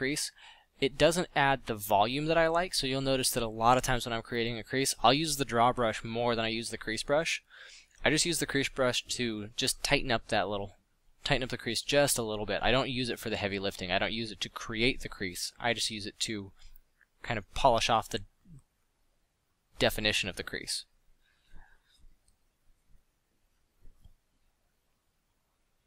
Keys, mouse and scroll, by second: 1.3 f, 3.7 f, 4.6 f, 6.8 drag, 7.5 drag, 7.5 f, 9.8 f, 11.8 click, 13.0 f, 13.8 f, 21.2 f.